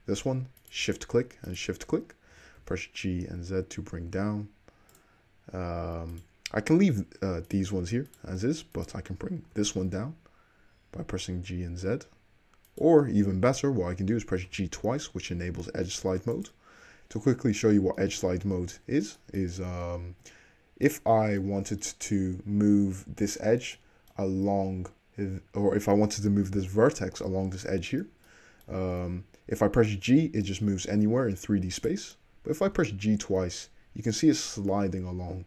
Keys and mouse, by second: 0.6 shift+click, 0.7 shift+middle click, 1.5 shift+click, 2.3 g, 6.2 click, 7.6 click, 8.2 click, 8.8 click, 9.6 g, 14.4 g, 17.6 alt+z, 19.8 ctrl+z, 20.0-21.0 ctrl+middle drag, 21.0 click, 21.1-22.8 middle drag, 29.8 g, 32.8 click, 32.8 g, 33.6 middle click.